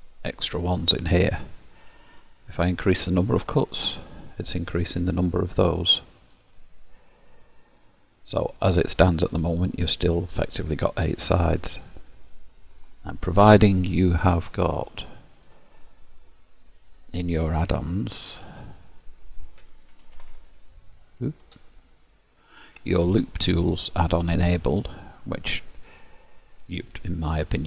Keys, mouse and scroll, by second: 3.2 click, 6.8 click, 8.4 click, 9.1 middle click, 15.4 click.